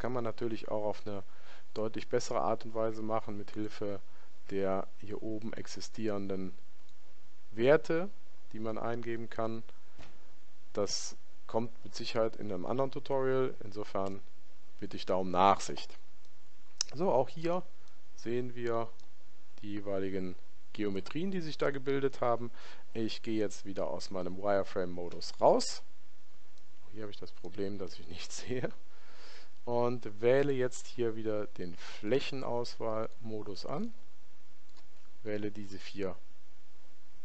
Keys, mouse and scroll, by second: 3.5 click, 14.1 n, 16.2-19.7 middle drag, 25.1 z, 26.5-28.5 middle drag, 30.3 click, 32.0-37.2 right drag.